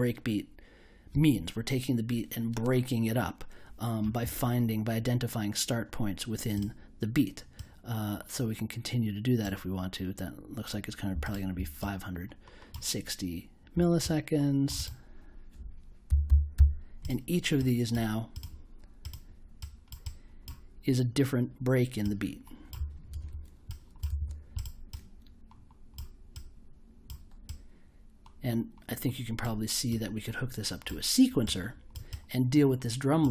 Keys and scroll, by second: 15.8-17.0 typing, 23.1 super+j.